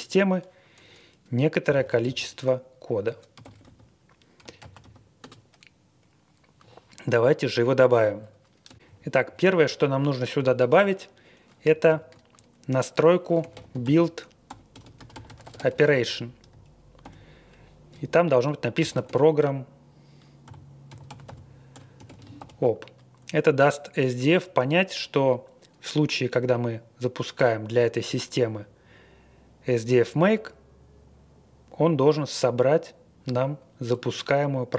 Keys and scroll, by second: 1.4-5.2 typing, 8.8 Down, 9.2 Left, 9.6 Right, 10.3 typing, 10.7 Return, 11.8 shift+;, 13.1-17.0 typing, 18.5-22.8 typing.